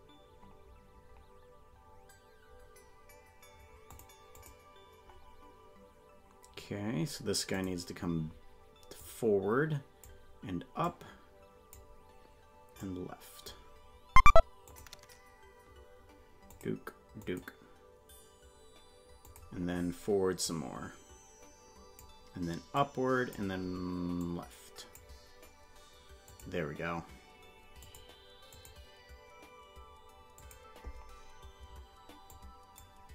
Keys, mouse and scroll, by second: 3.9 click, 4.3 click, 7.5 click, 8.9-10.1 drag, 10.8 click, 12.7 click, 14.6 click, 16.5 click, 17.2 click, 19.2 click, 20.4-22.0 drag, 22.7 click, 24.2 click, 26.2-28.1 drag, 28.5 click, 30.3 click, 32.2 click.